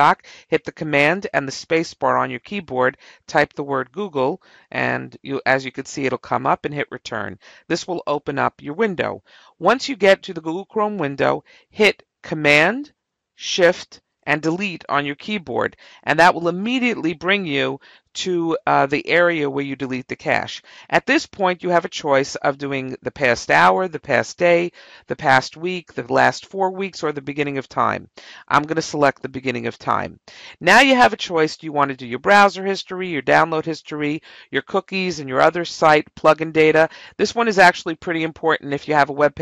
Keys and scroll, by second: 3.1 g, 3.7 o, 5.5 Return.